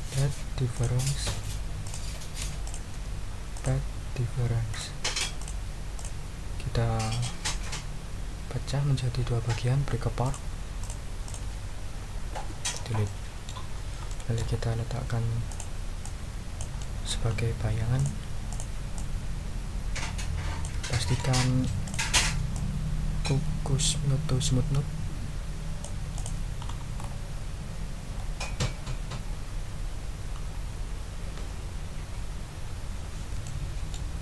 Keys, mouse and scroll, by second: 0.7 click, 1.8 click, 2.6 shift+click, 3.5 click, 4.7 click, 5.4 click, 5.9 click, 7.1 click, 10.2 click, 10.8 click, 11.2 click, 12.3 Delete, 13.0 click, 13.7 ctrl+scroll down 2, 14.1 ctrl+middle click, 14.6 ctrl+scroll up 1, 15.5 middle click, 16.0 middle click, 16.8-17.5 scroll up 3, 17.9 ctrl+click, 18.5 ctrl+click, 18.9-20.8 drag, 20.9 ctrl+right click, 21.3 ctrl+scroll up 2, 21.8 ctrl+click, 22.2 ctrl+click, 22.5-26.0 ctrl+drag, 26.1 click, 26.6-27.2 ctrl+scroll up 4, 28.1-28.9 ctrl+scroll up 4, 29.9-30.5 ctrl+scroll up 4, 32.1-33.2 ctrl+scroll down 6, 33.4 ctrl+middle click, 34.1 ctrl+scroll down 1.